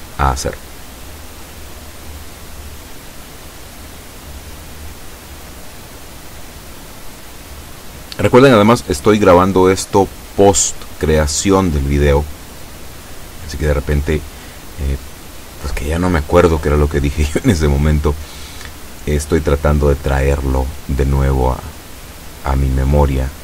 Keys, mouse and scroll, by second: 18.4 a, 19.8 b, 20.7-23.4 drag.